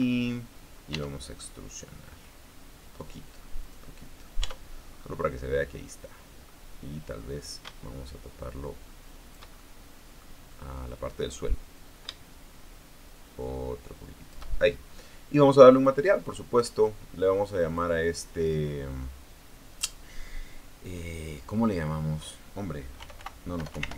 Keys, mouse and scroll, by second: 0.4 a, 1.6 e, 4.3 click, 5.1 Tab, 5.7-7.4 middle drag, 8.2-10.2 shift+drag, 10.6 middle click, 11.3 scroll up 1, 12.5-15.2 shift+drag, 16.5 click, 18.4 click, 23.5-23.9 typing.